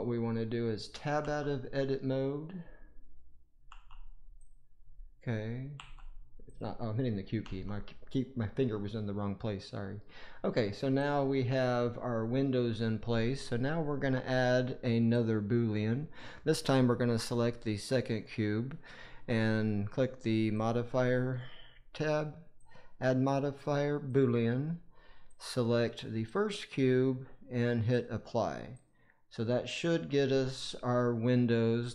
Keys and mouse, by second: 1.1 q, 3.6 q, 5.7 q, 7.3 Tab, 20.5 click, 22.6-24.1 drag, 25.2-26.3 drag, 27.9-28.8 drag, 29.6 click.